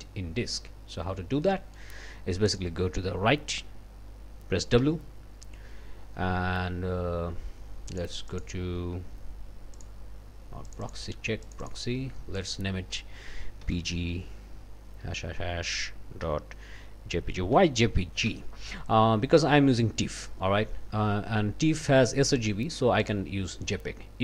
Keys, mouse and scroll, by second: 1.4 click, 2.5 click, 4.8 w, 7.9 click, 8.3 click, 9.7 click, 10.7 click, 11.4 click, 12.3 click, 13.4-15.0 typing, 17.1-18.3 typing, 23.0 click.